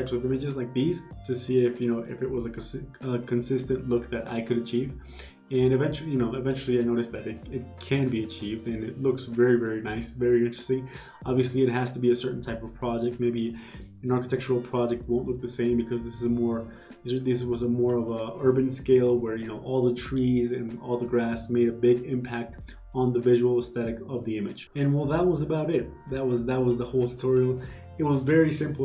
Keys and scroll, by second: 0.0-0.2 typing.